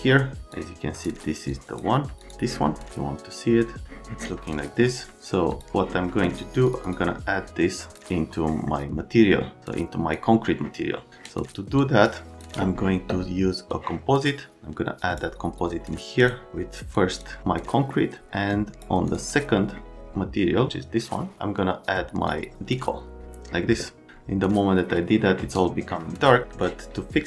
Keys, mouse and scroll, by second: 0.0 click, 0.5 click, 1.4 click, 2.2 click, 5.5 click, 6.7 click, 6.8 click, 7.7 click, 8.5 right click, 9.6 click, 11.8 click, 12.3 click, 13.6-15.1 drag, 16.2 click, 16.9 click, 17.6 right click, 18.4 click, 19.1 click, 22.2 click, 26.5 right click.